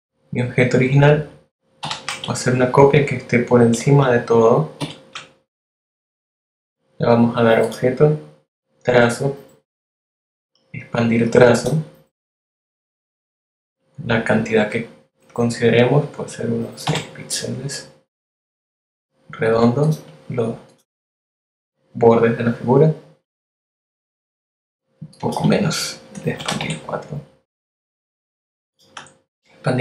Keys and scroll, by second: 0.8 super+c, 3.8 shift+super+v, 16.5 6, 26.2 BackSpace, 26.6 4, 27.5 z, 28.8 a.